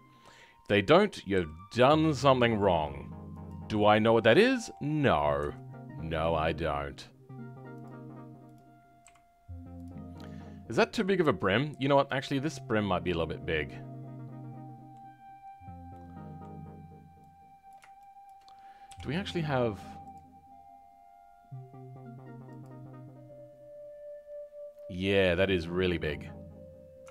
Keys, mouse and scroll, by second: 1.3 g, 4.1 scroll down 1, 4.4-8.9 shift+middle drag, 8.9 g, 9.9 scroll down 3, 10.1-13.2 middle drag, 15.1-15.8 scroll up 2, 15.8-17.6 middle drag, 17.6 click, 18.8 KP_7, 20.0-24.4 drag, 24.4-27.1 scroll down 3.